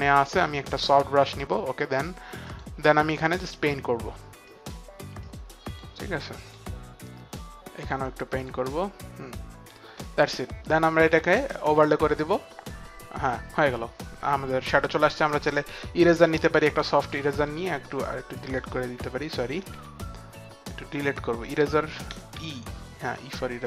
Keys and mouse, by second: 0.3 right click, 1.4 click, 2.6 click, 5.3 click, 5.8 click, 11.4 click, 12.3 click, 15.8 e, 16.5 click, 16.5 right click, 16.5 e, 18.5 right click, 18.5 click, 18.5 e, 19.7 ctrl+z, 22.3-23.6 typing, 22.5 click.